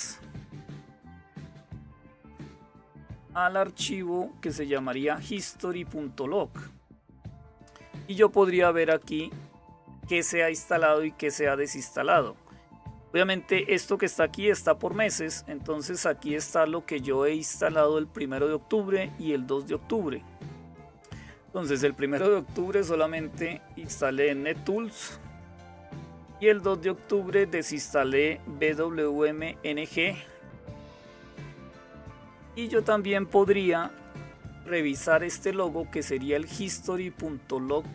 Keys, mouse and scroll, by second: 0.0-0.8 typing, 4.3-4.7 typing, 4.9 Tab, 8.4 Return, 23.0-25.3 drag, 26.5-28.9 drag, 28.9 click, 29.3-30.4 drag, 30.4 space, 30.8 q, 33.4 ctrl+-, 34.3 Up.